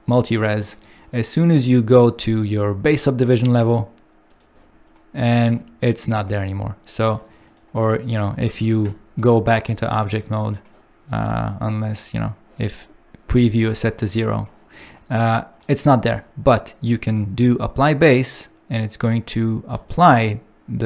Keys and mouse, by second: 2.4 click, 4.4 click, 7.6 click, 8.7 ctrl+Tab, 10.0 click, 20.4 click.